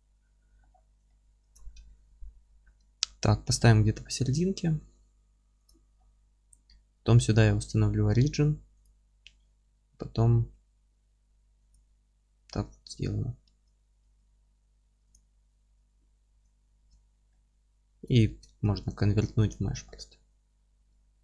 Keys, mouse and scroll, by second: 0.6-1.1 scroll down 1, 2.6 KP_7, 3.4-3.7 scroll up 1, 4.8 g, 5.7 click, 6.0-11.6 middle drag, 10.5 alt+x, 11.6 click, 12.1-12.5 scroll down 1, 12.5 scroll up 1, 12.6 Tab, 13.1-15.1 middle drag, 13.4 Tab, 15.1 click, 16.3 Tab, 17.3-21.2 middle drag, 18.2 Tab, 19.5 alt+c, 20.8 Tab.